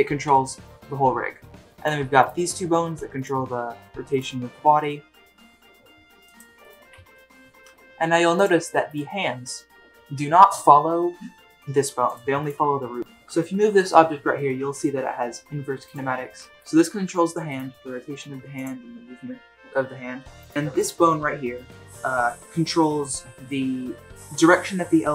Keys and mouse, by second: 4.1 click, 4.5 r, 6.2 r, 6.7 click, 6.8 r, 8.3 r, 8.8 click, 9.2 g, 12.4 click, 12.6 g, 13.0 alt+r, 14.8 g, 16.3 r, 16.5 middle click, 16.5 r, 17.0 g, 17.6 r, 18.8 g, 21.2-21.7 middle drag, 22.5-22.8 middle drag.